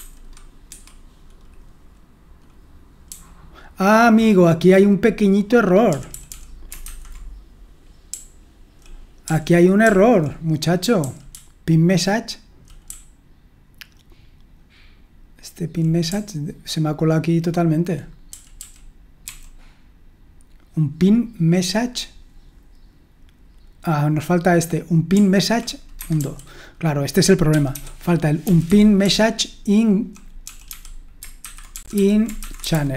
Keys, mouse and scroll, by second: 0.7 Escape, 0.7 typing, 3.7-6.9 typing, 7.9-9.8 typing, 11.0-14.0 typing, 16.1-17.2 typing, 19.2 d, 26.0 Escape, 26.2-32.9 typing, 28.7 Escape.